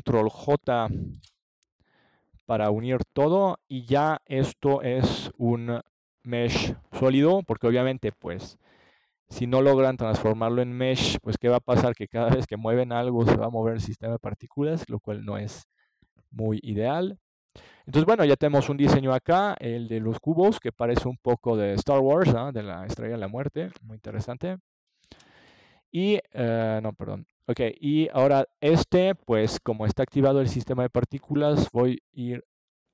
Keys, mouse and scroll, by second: 3.6 middle click, 3.9 click, 5.0 click, 7.4-10.0 middle drag, 10.5 ctrl+s, 10.9 Tab, 12.0 Tab, 12.5-13.8 right drag, 16.9-18.7 drag, 19.6-22.0 middle drag.